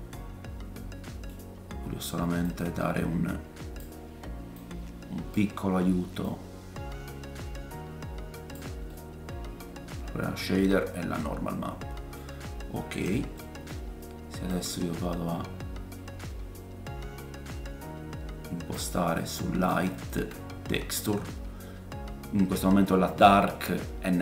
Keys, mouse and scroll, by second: 1.6-2.4 scroll up 2, 2.4 click, 2.4-4.6 scroll up 1, 4.6 click, 8.9 click, 9.3 middle click, 10.7 scroll down 2, 11.2 middle click, 12.5-13.1 scroll down 4, 13.4-13.7 scroll up 2, 14.5 click, 18.9 middle click, 19.7 ctrl+shift+click, 20.6 scroll up 4.